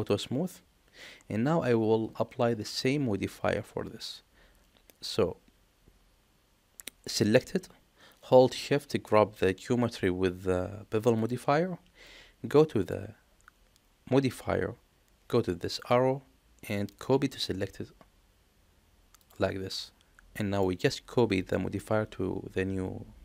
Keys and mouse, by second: 0.0 click, 11.0 shift+click, 12.7 click, 15.7-19.2 drag, 20.3 middle click, 21.4 middle click.